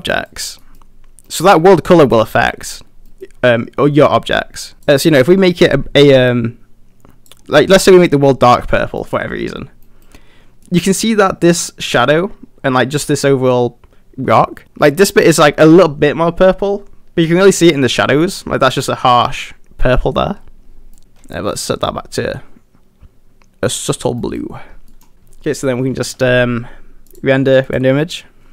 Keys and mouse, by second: 0.7 middle drag, 1.3 middle drag, 2.1 middle drag, 3.1 middle drag, 4.8 click, 9.0 middle click, 9.9 middle drag, 10.7 middle drag, 21.0 middle click, 24.2 middle drag, 24.9 middle drag, 25.2 g, 27.2-28.5 drag.